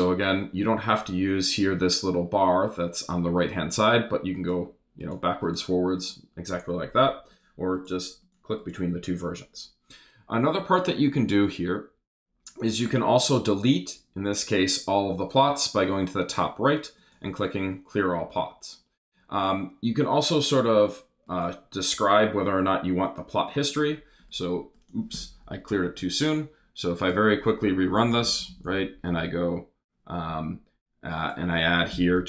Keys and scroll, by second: 25.7 super+Return, 28.0 super+Left, 28.9 super+Left, 29.1 super+Return, 31.9 BackSpace.